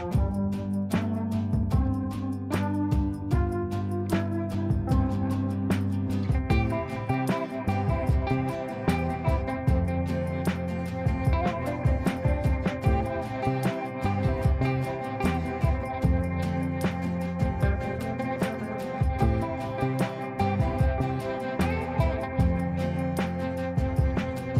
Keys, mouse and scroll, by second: 0.0-6.2 typing, 6.2 ctrl+space, 7.5 shift+click, 8.3 r, 8.7 click, 10.9-11.3 scroll down 1, 11.9 click, 13.3 ctrl+right click, 14.2 click, 15.3 ctrl+space, 15.9 click, 17.2 ctrl+z, 18.0 ctrl+z, 19.0 click, 20.3 ctrl+right click, 21.3 click, 22.6 ctrl+a.